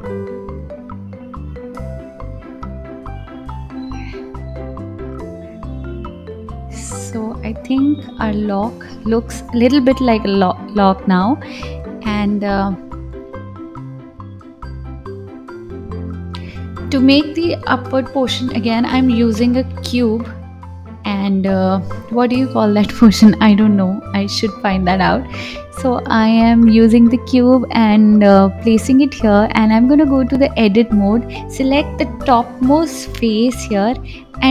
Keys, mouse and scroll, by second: 0.0 click, 1.4 g, 3.4-3.7 scroll down 2, 3.7 middle click, 5.5 KP_1, 6.4-7.4 drag, 7.6-10.0 scroll down 2, 10.0 click, 10.9 click, 14.1-15.0 drag, 15.0 shift+a, 17.2 s, 17.5 g, 18.4 s, 20.1 KP_7, 21.7 KP_1, 22.8 g, 25.1 g, 26.7 scroll up 2, 27.8-29.0 drag, 29.3-29.7 scroll down 1, 29.7 middle click, 31.4 click, 33.1 KP_1, 33.5-34.5 scroll up 3.